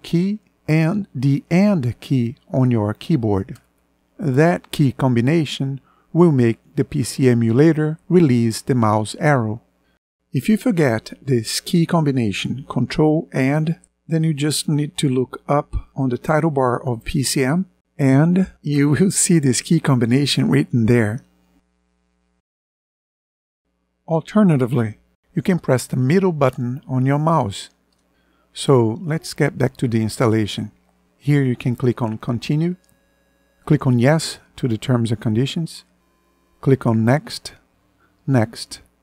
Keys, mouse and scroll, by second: 12.7 ctrl+End, 25.7-27.7 middle drag.